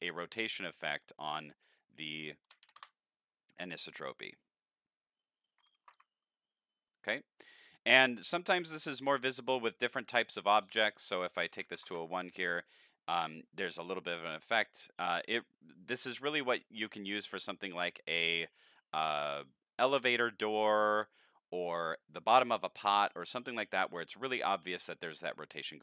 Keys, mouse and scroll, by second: 0.4 scroll up 1, 0.7 middle drag, 1.6 click, 3.7-4.3 middle drag, 5.2 click, 7.7 middle click, 10.6 click, 11.5 End, 11.7 Delete, 11.8 Insert, 14.0 middle click, 14.8 middle click, 16.2 middle click, 25.0-25.6 middle drag.